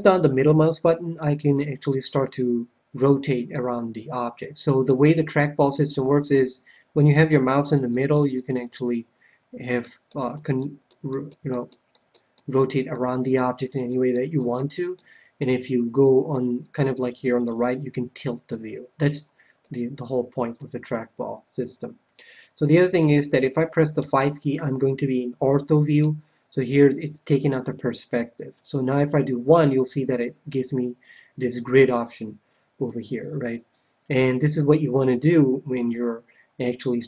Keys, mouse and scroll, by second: 0.1-5.1 middle drag, 5.3-7.0 middle drag, 7.7-16.1 middle drag, 17.4-19.0 middle drag, 19.7-21.3 middle drag, 22.9-24.5 middle drag, 23.9 KP_5, 25.0-26.5 middle drag, 29.2 KP_1, 31.7-33.8 middle drag.